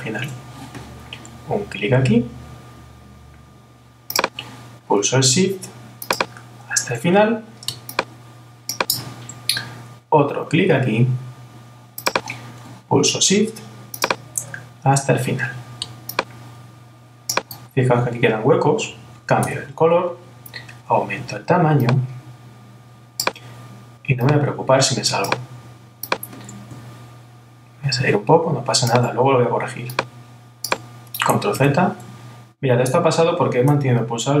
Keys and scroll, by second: 31.6 super+z.